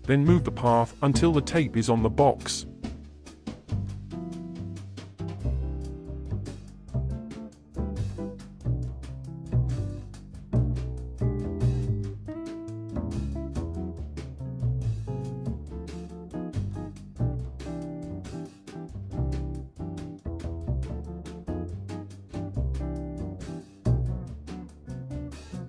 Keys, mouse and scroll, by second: 2.0 Tab, 2.2 a, 2.4 g, 4.1-4.4 scroll up 9, 4.4 middle click, 4.8 KP_7, 5.1-5.4 scroll down 5, 5.4 shift+middle click, 5.5 scroll up 3, 5.7 shift+middle click, 6.0 g, 8.2-10.1 shift+middle drag, 10.1-10.6 scroll down 5, 10.6 shift+middle click, 11.4-11.8 scroll up 1, 11.8 Tab, 12.8-14.6 shift+middle drag, 14.6-15.2 scroll down 3, 15.2-16.5 scroll up 2, 16.5 g, 22.5 ctrl+z, 23.5 ctrl+s.